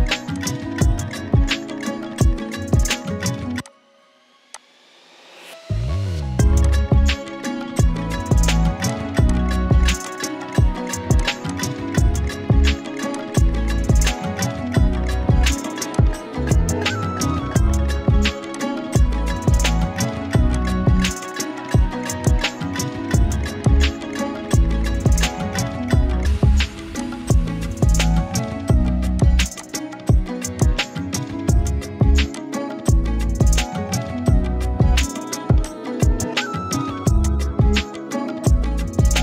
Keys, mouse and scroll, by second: 0.3 click, 3.6 click, 5.4 ctrl+z, 6.6-7.5 drag, 7.9 right click, 8.9-20.5 drag, 22.2-23.6 drag, 23.6-25.5 drag, 28.2 ctrl+g, 29.2 shift+click, 33.1 Down, 35.6-38.8 drag.